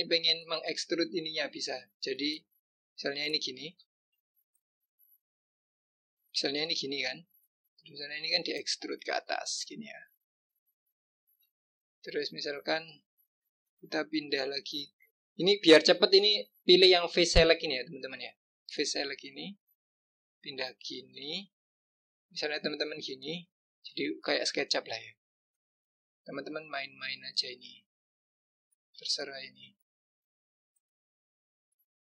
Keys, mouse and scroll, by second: 2.1-3.6 drag, 4.4 shift+click, 5.5 shift+click, 6.5 shift+click, 8.0-9.3 drag, 12.7 click, 14.2 click, 17.2 click, 18.3 click, 19.5 click, 22.0 click, 23.0 click, 28.3 click, 29.5 click, 30.4 click, 31.8 click.